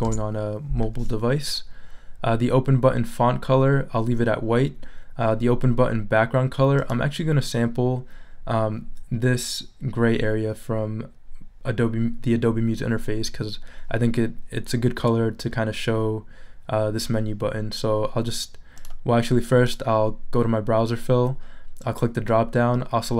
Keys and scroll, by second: 0.0 Return.